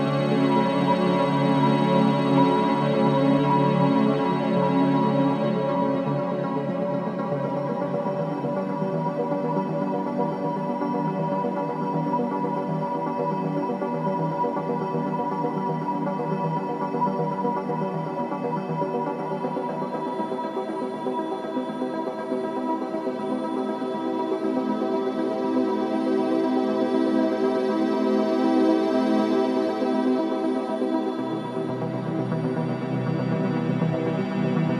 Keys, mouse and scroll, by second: 0.1 o, 1.2 f, 2.4 right click, 3.4-4.1 scroll down 1, 6.1 scroll up 1, 7.6 click, 7.6 typing, 9.9 scroll up 1, 14.2 scroll down 1, 15.3-16.1 typing, 17.8 right click, 19.7 2, 20.4 shift+', 27.1 1, 31.3 shift+'.